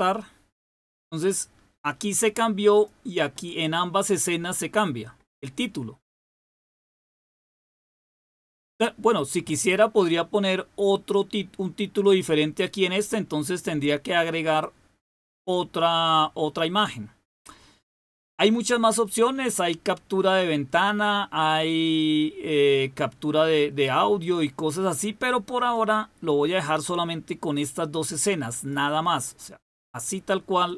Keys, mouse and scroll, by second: 2.6 click, 11.9 click, 14.4 click, 14.8 click, 25.6 click, 27.3 click, 28.4 click, 29.1 click, 30.5 click.